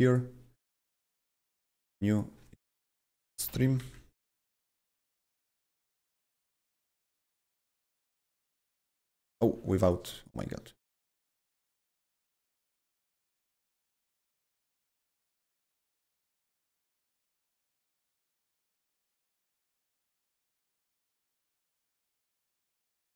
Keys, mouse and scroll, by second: 0.0 right click, 0.0 right click, 2.1 click, 2.6-4.3 typing, 4.5 Return, 6.0 click, 6.0 click, 6.1 typing, 7.5 click, 8.7 click, 8.8 double click, 9.8 click, 10.1 click, 10.3 double click, 11.1 click, 11.2 double click, 11.9 click, 12.0 double click, 12.5 click, 13.0 click, 14.7 click, 16.0 Right, 16.9 BackSpace, 17.3 Left, 18.0 Left, 18.3 Delete, 19.6 click, 20.8 click, 20.9 double click, 21.5 click, 22.9 click.